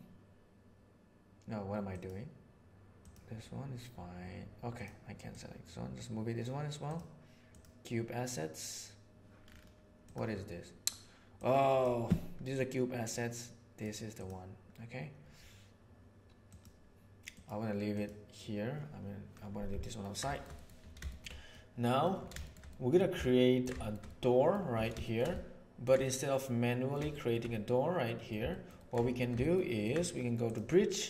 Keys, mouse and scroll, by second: 2.0 click, 4.7 click, 5.3-6.4 drag, 7.5 click, 10.0 click, 11.4-11.8 drag, 13.0-13.8 drag, 16.4 click, 17.4 click, 18.0 drag, 19.8 ctrl+middle click, 20.3 shift+middle click, 20.5 middle click, 21.1 shift+middle click, 21.5-22.1 middle drag, 22.4 shift+middle drag, 22.7-23.0 middle drag, 23.2-23.6 ctrl+middle drag, 23.8 shift+middle drag, 24.0-24.4 middle drag, 25.0 shift+middle click, 25.3-25.9 ctrl+middle drag, 26.0-26.9 middle drag, 27.1 shift+middle click, 27.5-28.3 middle drag, 28.5-28.9 ctrl+middle drag, 29.3 ctrl+click.